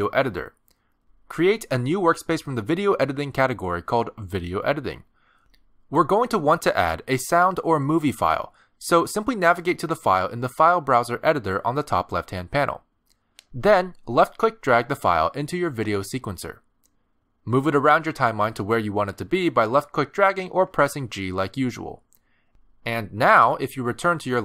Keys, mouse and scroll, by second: 1.3 click.